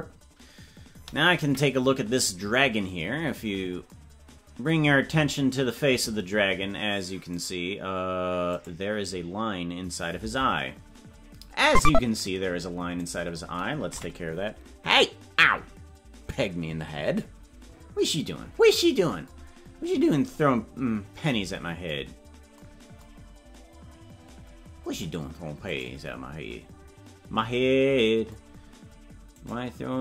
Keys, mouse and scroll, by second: 1.4 KP_Decimal, 2.5-2.8 scroll up 6, 3.7 scroll down 2, 7.5-10.3 right drag, 10.3 Tab, 13.1 right click, 13.9 KP_Decimal, 18.6-18.9 scroll down 3, 19.5 scroll down 1, 20.9-21.3 scroll down 3, 22.3 scroll down 1, 23.4 scroll down 1, 25.8-26.8 right drag, 26.8 scroll up 1, 29.4-30.0 right drag.